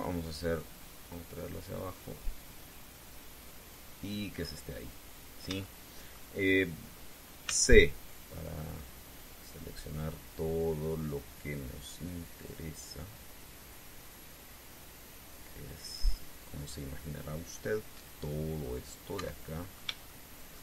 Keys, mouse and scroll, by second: 1.6 click, 2.3-3.0 scroll up 2, 5.1-5.7 scroll down 4, 6.4 shift+middle click, 8.2 c, 8.8-19.0 drag, 19.9 Escape, 20.2-20.6 scroll up 2.